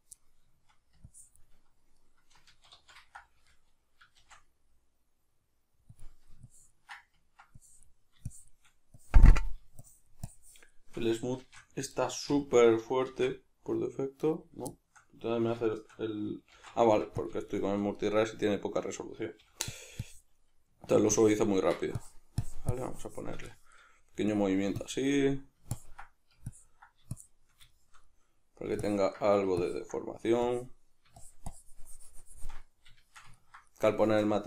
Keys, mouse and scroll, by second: 0.2 middle click, 1.1 ctrl+click, 2.0-6.0 middle drag, 2.5 ctrl+z, 4.2 shift+f, 6.5-12.0 ctrl+drag, 11.4 shift+f, 12.0 right click, 12.3 s, 13.1 shift+f, 14.3 right click, 14.7-17.3 shift+middle drag, 16.5 shift+c, 17.3 click, 17.5-19.8 shift+middle drag, 19.4 f, 20.1-23.5 drag, 23.5 shift+middle click, 24.3 click, 25.1 middle click, 25.7-27.7 ctrl+drag, 27.7-28.8 shift+middle drag, 28.8-32.7 ctrl+drag, 32.7-34.4 shift+middle drag.